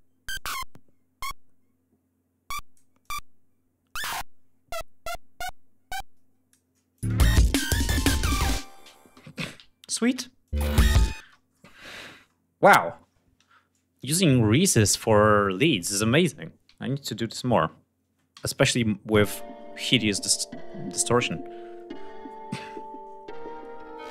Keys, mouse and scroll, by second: 2.5 click, 3.5-6.2 drag, 6.5 click, 6.6 space, 8.9 g, 9.1 ctrl+scroll down 2, 9.6 ctrl+space, 9.9 ctrl+click, 10.3 ctrl+scroll down 1, 10.7 ctrl+space, 11.8 ctrl+scroll down 1, 13.5 click, 17.8 ctrl+s, 18.8 space, 20.8-22.2 drag, 22.3-23.0 scroll down 4, 23.0-23.4 scroll up 2, 23.7 ctrl+scroll up 2.